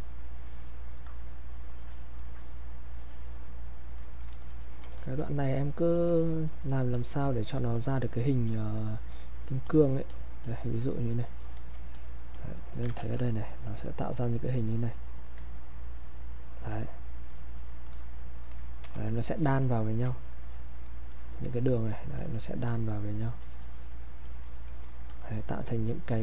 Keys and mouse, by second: 2.9 click, 4.4 alt+click, 5.0 alt+click, 5.4-11.0 drag, 11.7 click, 13.0 ctrl+shift+1, 13.2 ctrl+shift+click, 17.3 click, 20.4 alt+click, 21.1-24.8 drag.